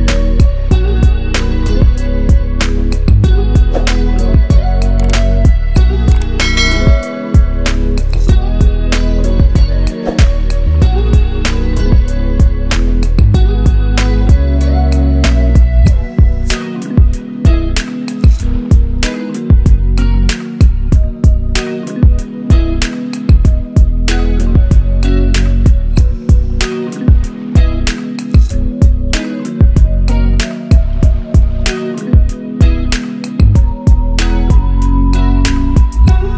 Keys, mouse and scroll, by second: 0.1 right click, 0.7 click, 6.0-7.2 drag, 9.0 click, 10.9 click, 12.2 click, 14.7-15.1 drag, 22.7 scroll up 1, 23.1 scroll down 1, 25.3 click, 26.4-27.1 shift+drag, 29.5 Right, 30.9-31.2 click, 31.3 Right, 31.9 Down, 32.4 Left, 33.5-34.1 click, 34.5 Down, 34.9 click.